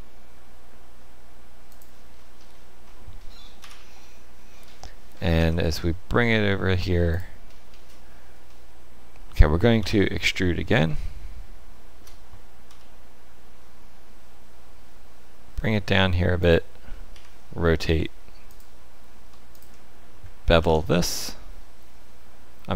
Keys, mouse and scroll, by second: 2.1-3.6 scroll down 8, 3.6 KP_3, 5.3 g, 7.4-8.3 scroll up 3, 8.3 scroll up 1, 8.4 shift+middle click, 9.7 KP_3, 10.9 shift+middle click, 12.6 e, 17.1 r, 19.5 alt+click, 20.6 ctrl+b.